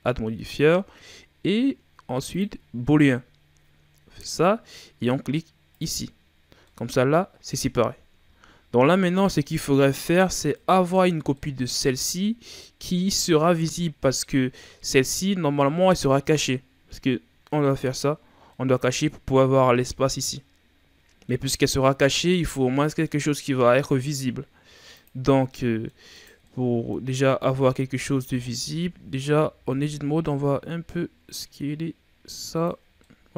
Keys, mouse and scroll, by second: 2.3 click, 4.1 click, 6.6-7.7 middle drag, 7.7-8.1 ctrl+scroll down 2, 9.0-9.3 scroll up 1, 9.3-10.5 middle drag, 10.5 right click, 11.3 scroll up 1, 11.3-14.5 middle drag, 17.6 click, 18.5-20.0 middle drag, 20.0-20.3 scroll down 1, 20.3-21.5 middle drag, 21.5-22.1 scroll up 1, 22.1 scroll up 1, 22.2-24.8 middle drag, 24.8 click, 25.4-26.1 middle drag, 26.1 right click, 26.4-27.2 middle drag, 27.2 Tab, 28.1 a, 28.4 a, 28.8 a, 29.5 s, 32.9-33.3 middle drag.